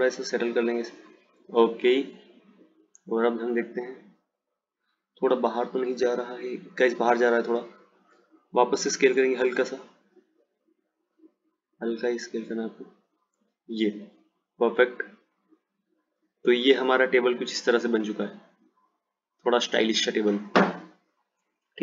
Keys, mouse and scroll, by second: 3.1 click, 4.0 click, 5.4 click, 7.8 click, 9.1 s, 14.1 click, 16.0 click, 17.7 click.